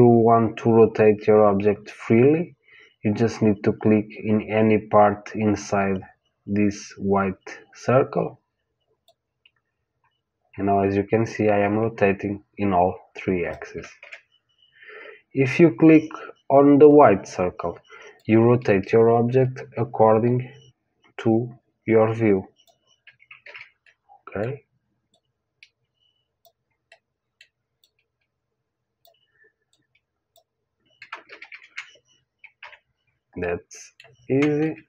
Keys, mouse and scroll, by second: 9.0 click, 14.0 ctrl+z, 18.1 click, 23.4 ctrl+z, 23.8-25.1 middle drag, 25.1 click, 27.1 middle click, 27.8-31.7 drag, 31.2 ctrl+z, 31.4 ctrl+z, 32.5 KP_1, 33.3-34.8 middle drag, 34.6 ctrl+z.